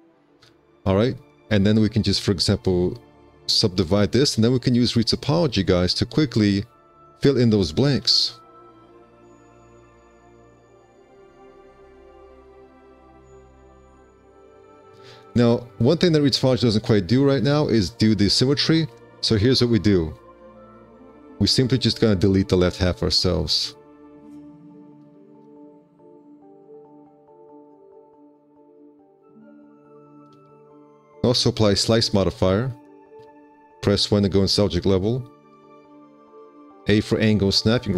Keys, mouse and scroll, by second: 0.0 3, 8.4 5, 21.7 4, 23.5 1, 25.6 4, 28.1 1, 31.0 1, 35.9 z, 36.3 e, 36.8 a.